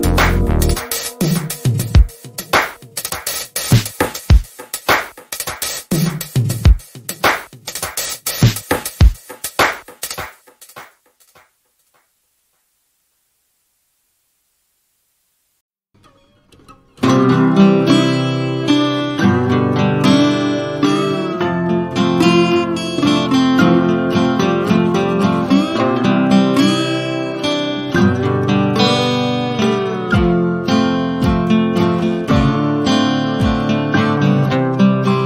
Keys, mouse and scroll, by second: 1.0 ctrl+scroll down 1, 1.6 ctrl+scroll down 1, 2.2 ctrl+scroll down 1, 3.2-3.5 ctrl+scroll up 1, 3.8 F1, 4.3 shift+click, 4.6 =, 4.9 F2, 5.7 click, 5.8-6.3 click, 6.3 ctrl+Delete, 8.4-10.0 drag, 15.8 ctrl+scroll down 1, 17.0-18.0 click, 18.0 ctrl+scroll down 1, 18.2 F1, 20.9 ctrl+F1, 21.3-21.9 ctrl+scroll up 1, 21.9-22.2 ctrl+scroll down 1, 22.3 ctrl+scroll up 1, 22.9 shift+right click, 22.9 shift+right click, 23.4 ctrl+scroll up 1, 24.0 shift+right click, 24.8 b, 25.6 click, 28.5 ctrl+shift+=, 29.1 F1, 29.6 click, 30.0 ctrl+c, 30.2 click, 30.6 ctrl+shift+v, 31.1 ctrl+scroll down 1, 32.1-33.0 click, 32.8 F1, 33.3 shift+right click, 34.0 b.